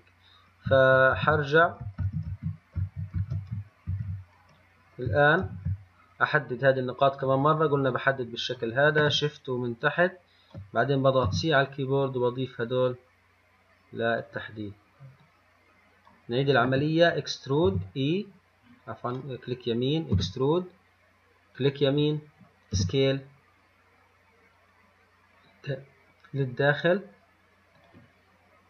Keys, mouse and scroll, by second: 1.4 ctrl+shift+z, 2.3 ctrl+shift+z, 2.5 ctrl+shift+z, 3.0 ctrl+shift+z, 3.4 ctrl+shift+z, 4.1 ctrl+z, 5.7 ctrl+y, 7.5 click, 10.1 shift+click, 11.5 c, 20.4 e, 23.0 s.